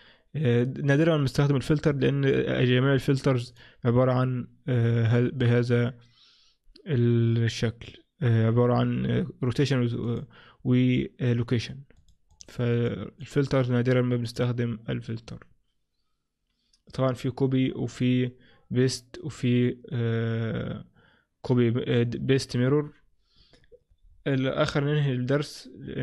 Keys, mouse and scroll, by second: 3.6 click, 10.1 click, 12.0 click, 12.4 click, 12.8 click, 13.3 click, 14.3 click, 24.2-24.5 scroll down 5, 24.5-25.2 scroll up 3, 25.2-26.0 scroll down 1.